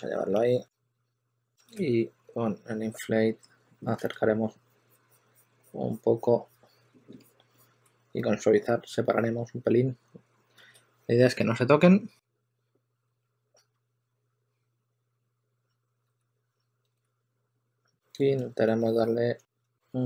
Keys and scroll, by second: 0.0-1.5 typing, 3.9 super+z, 9.8 2, 11.6-13.9 typing, 16.3-17.6 typing, 18.3 shift+super+d, 18.8 shift+super+d.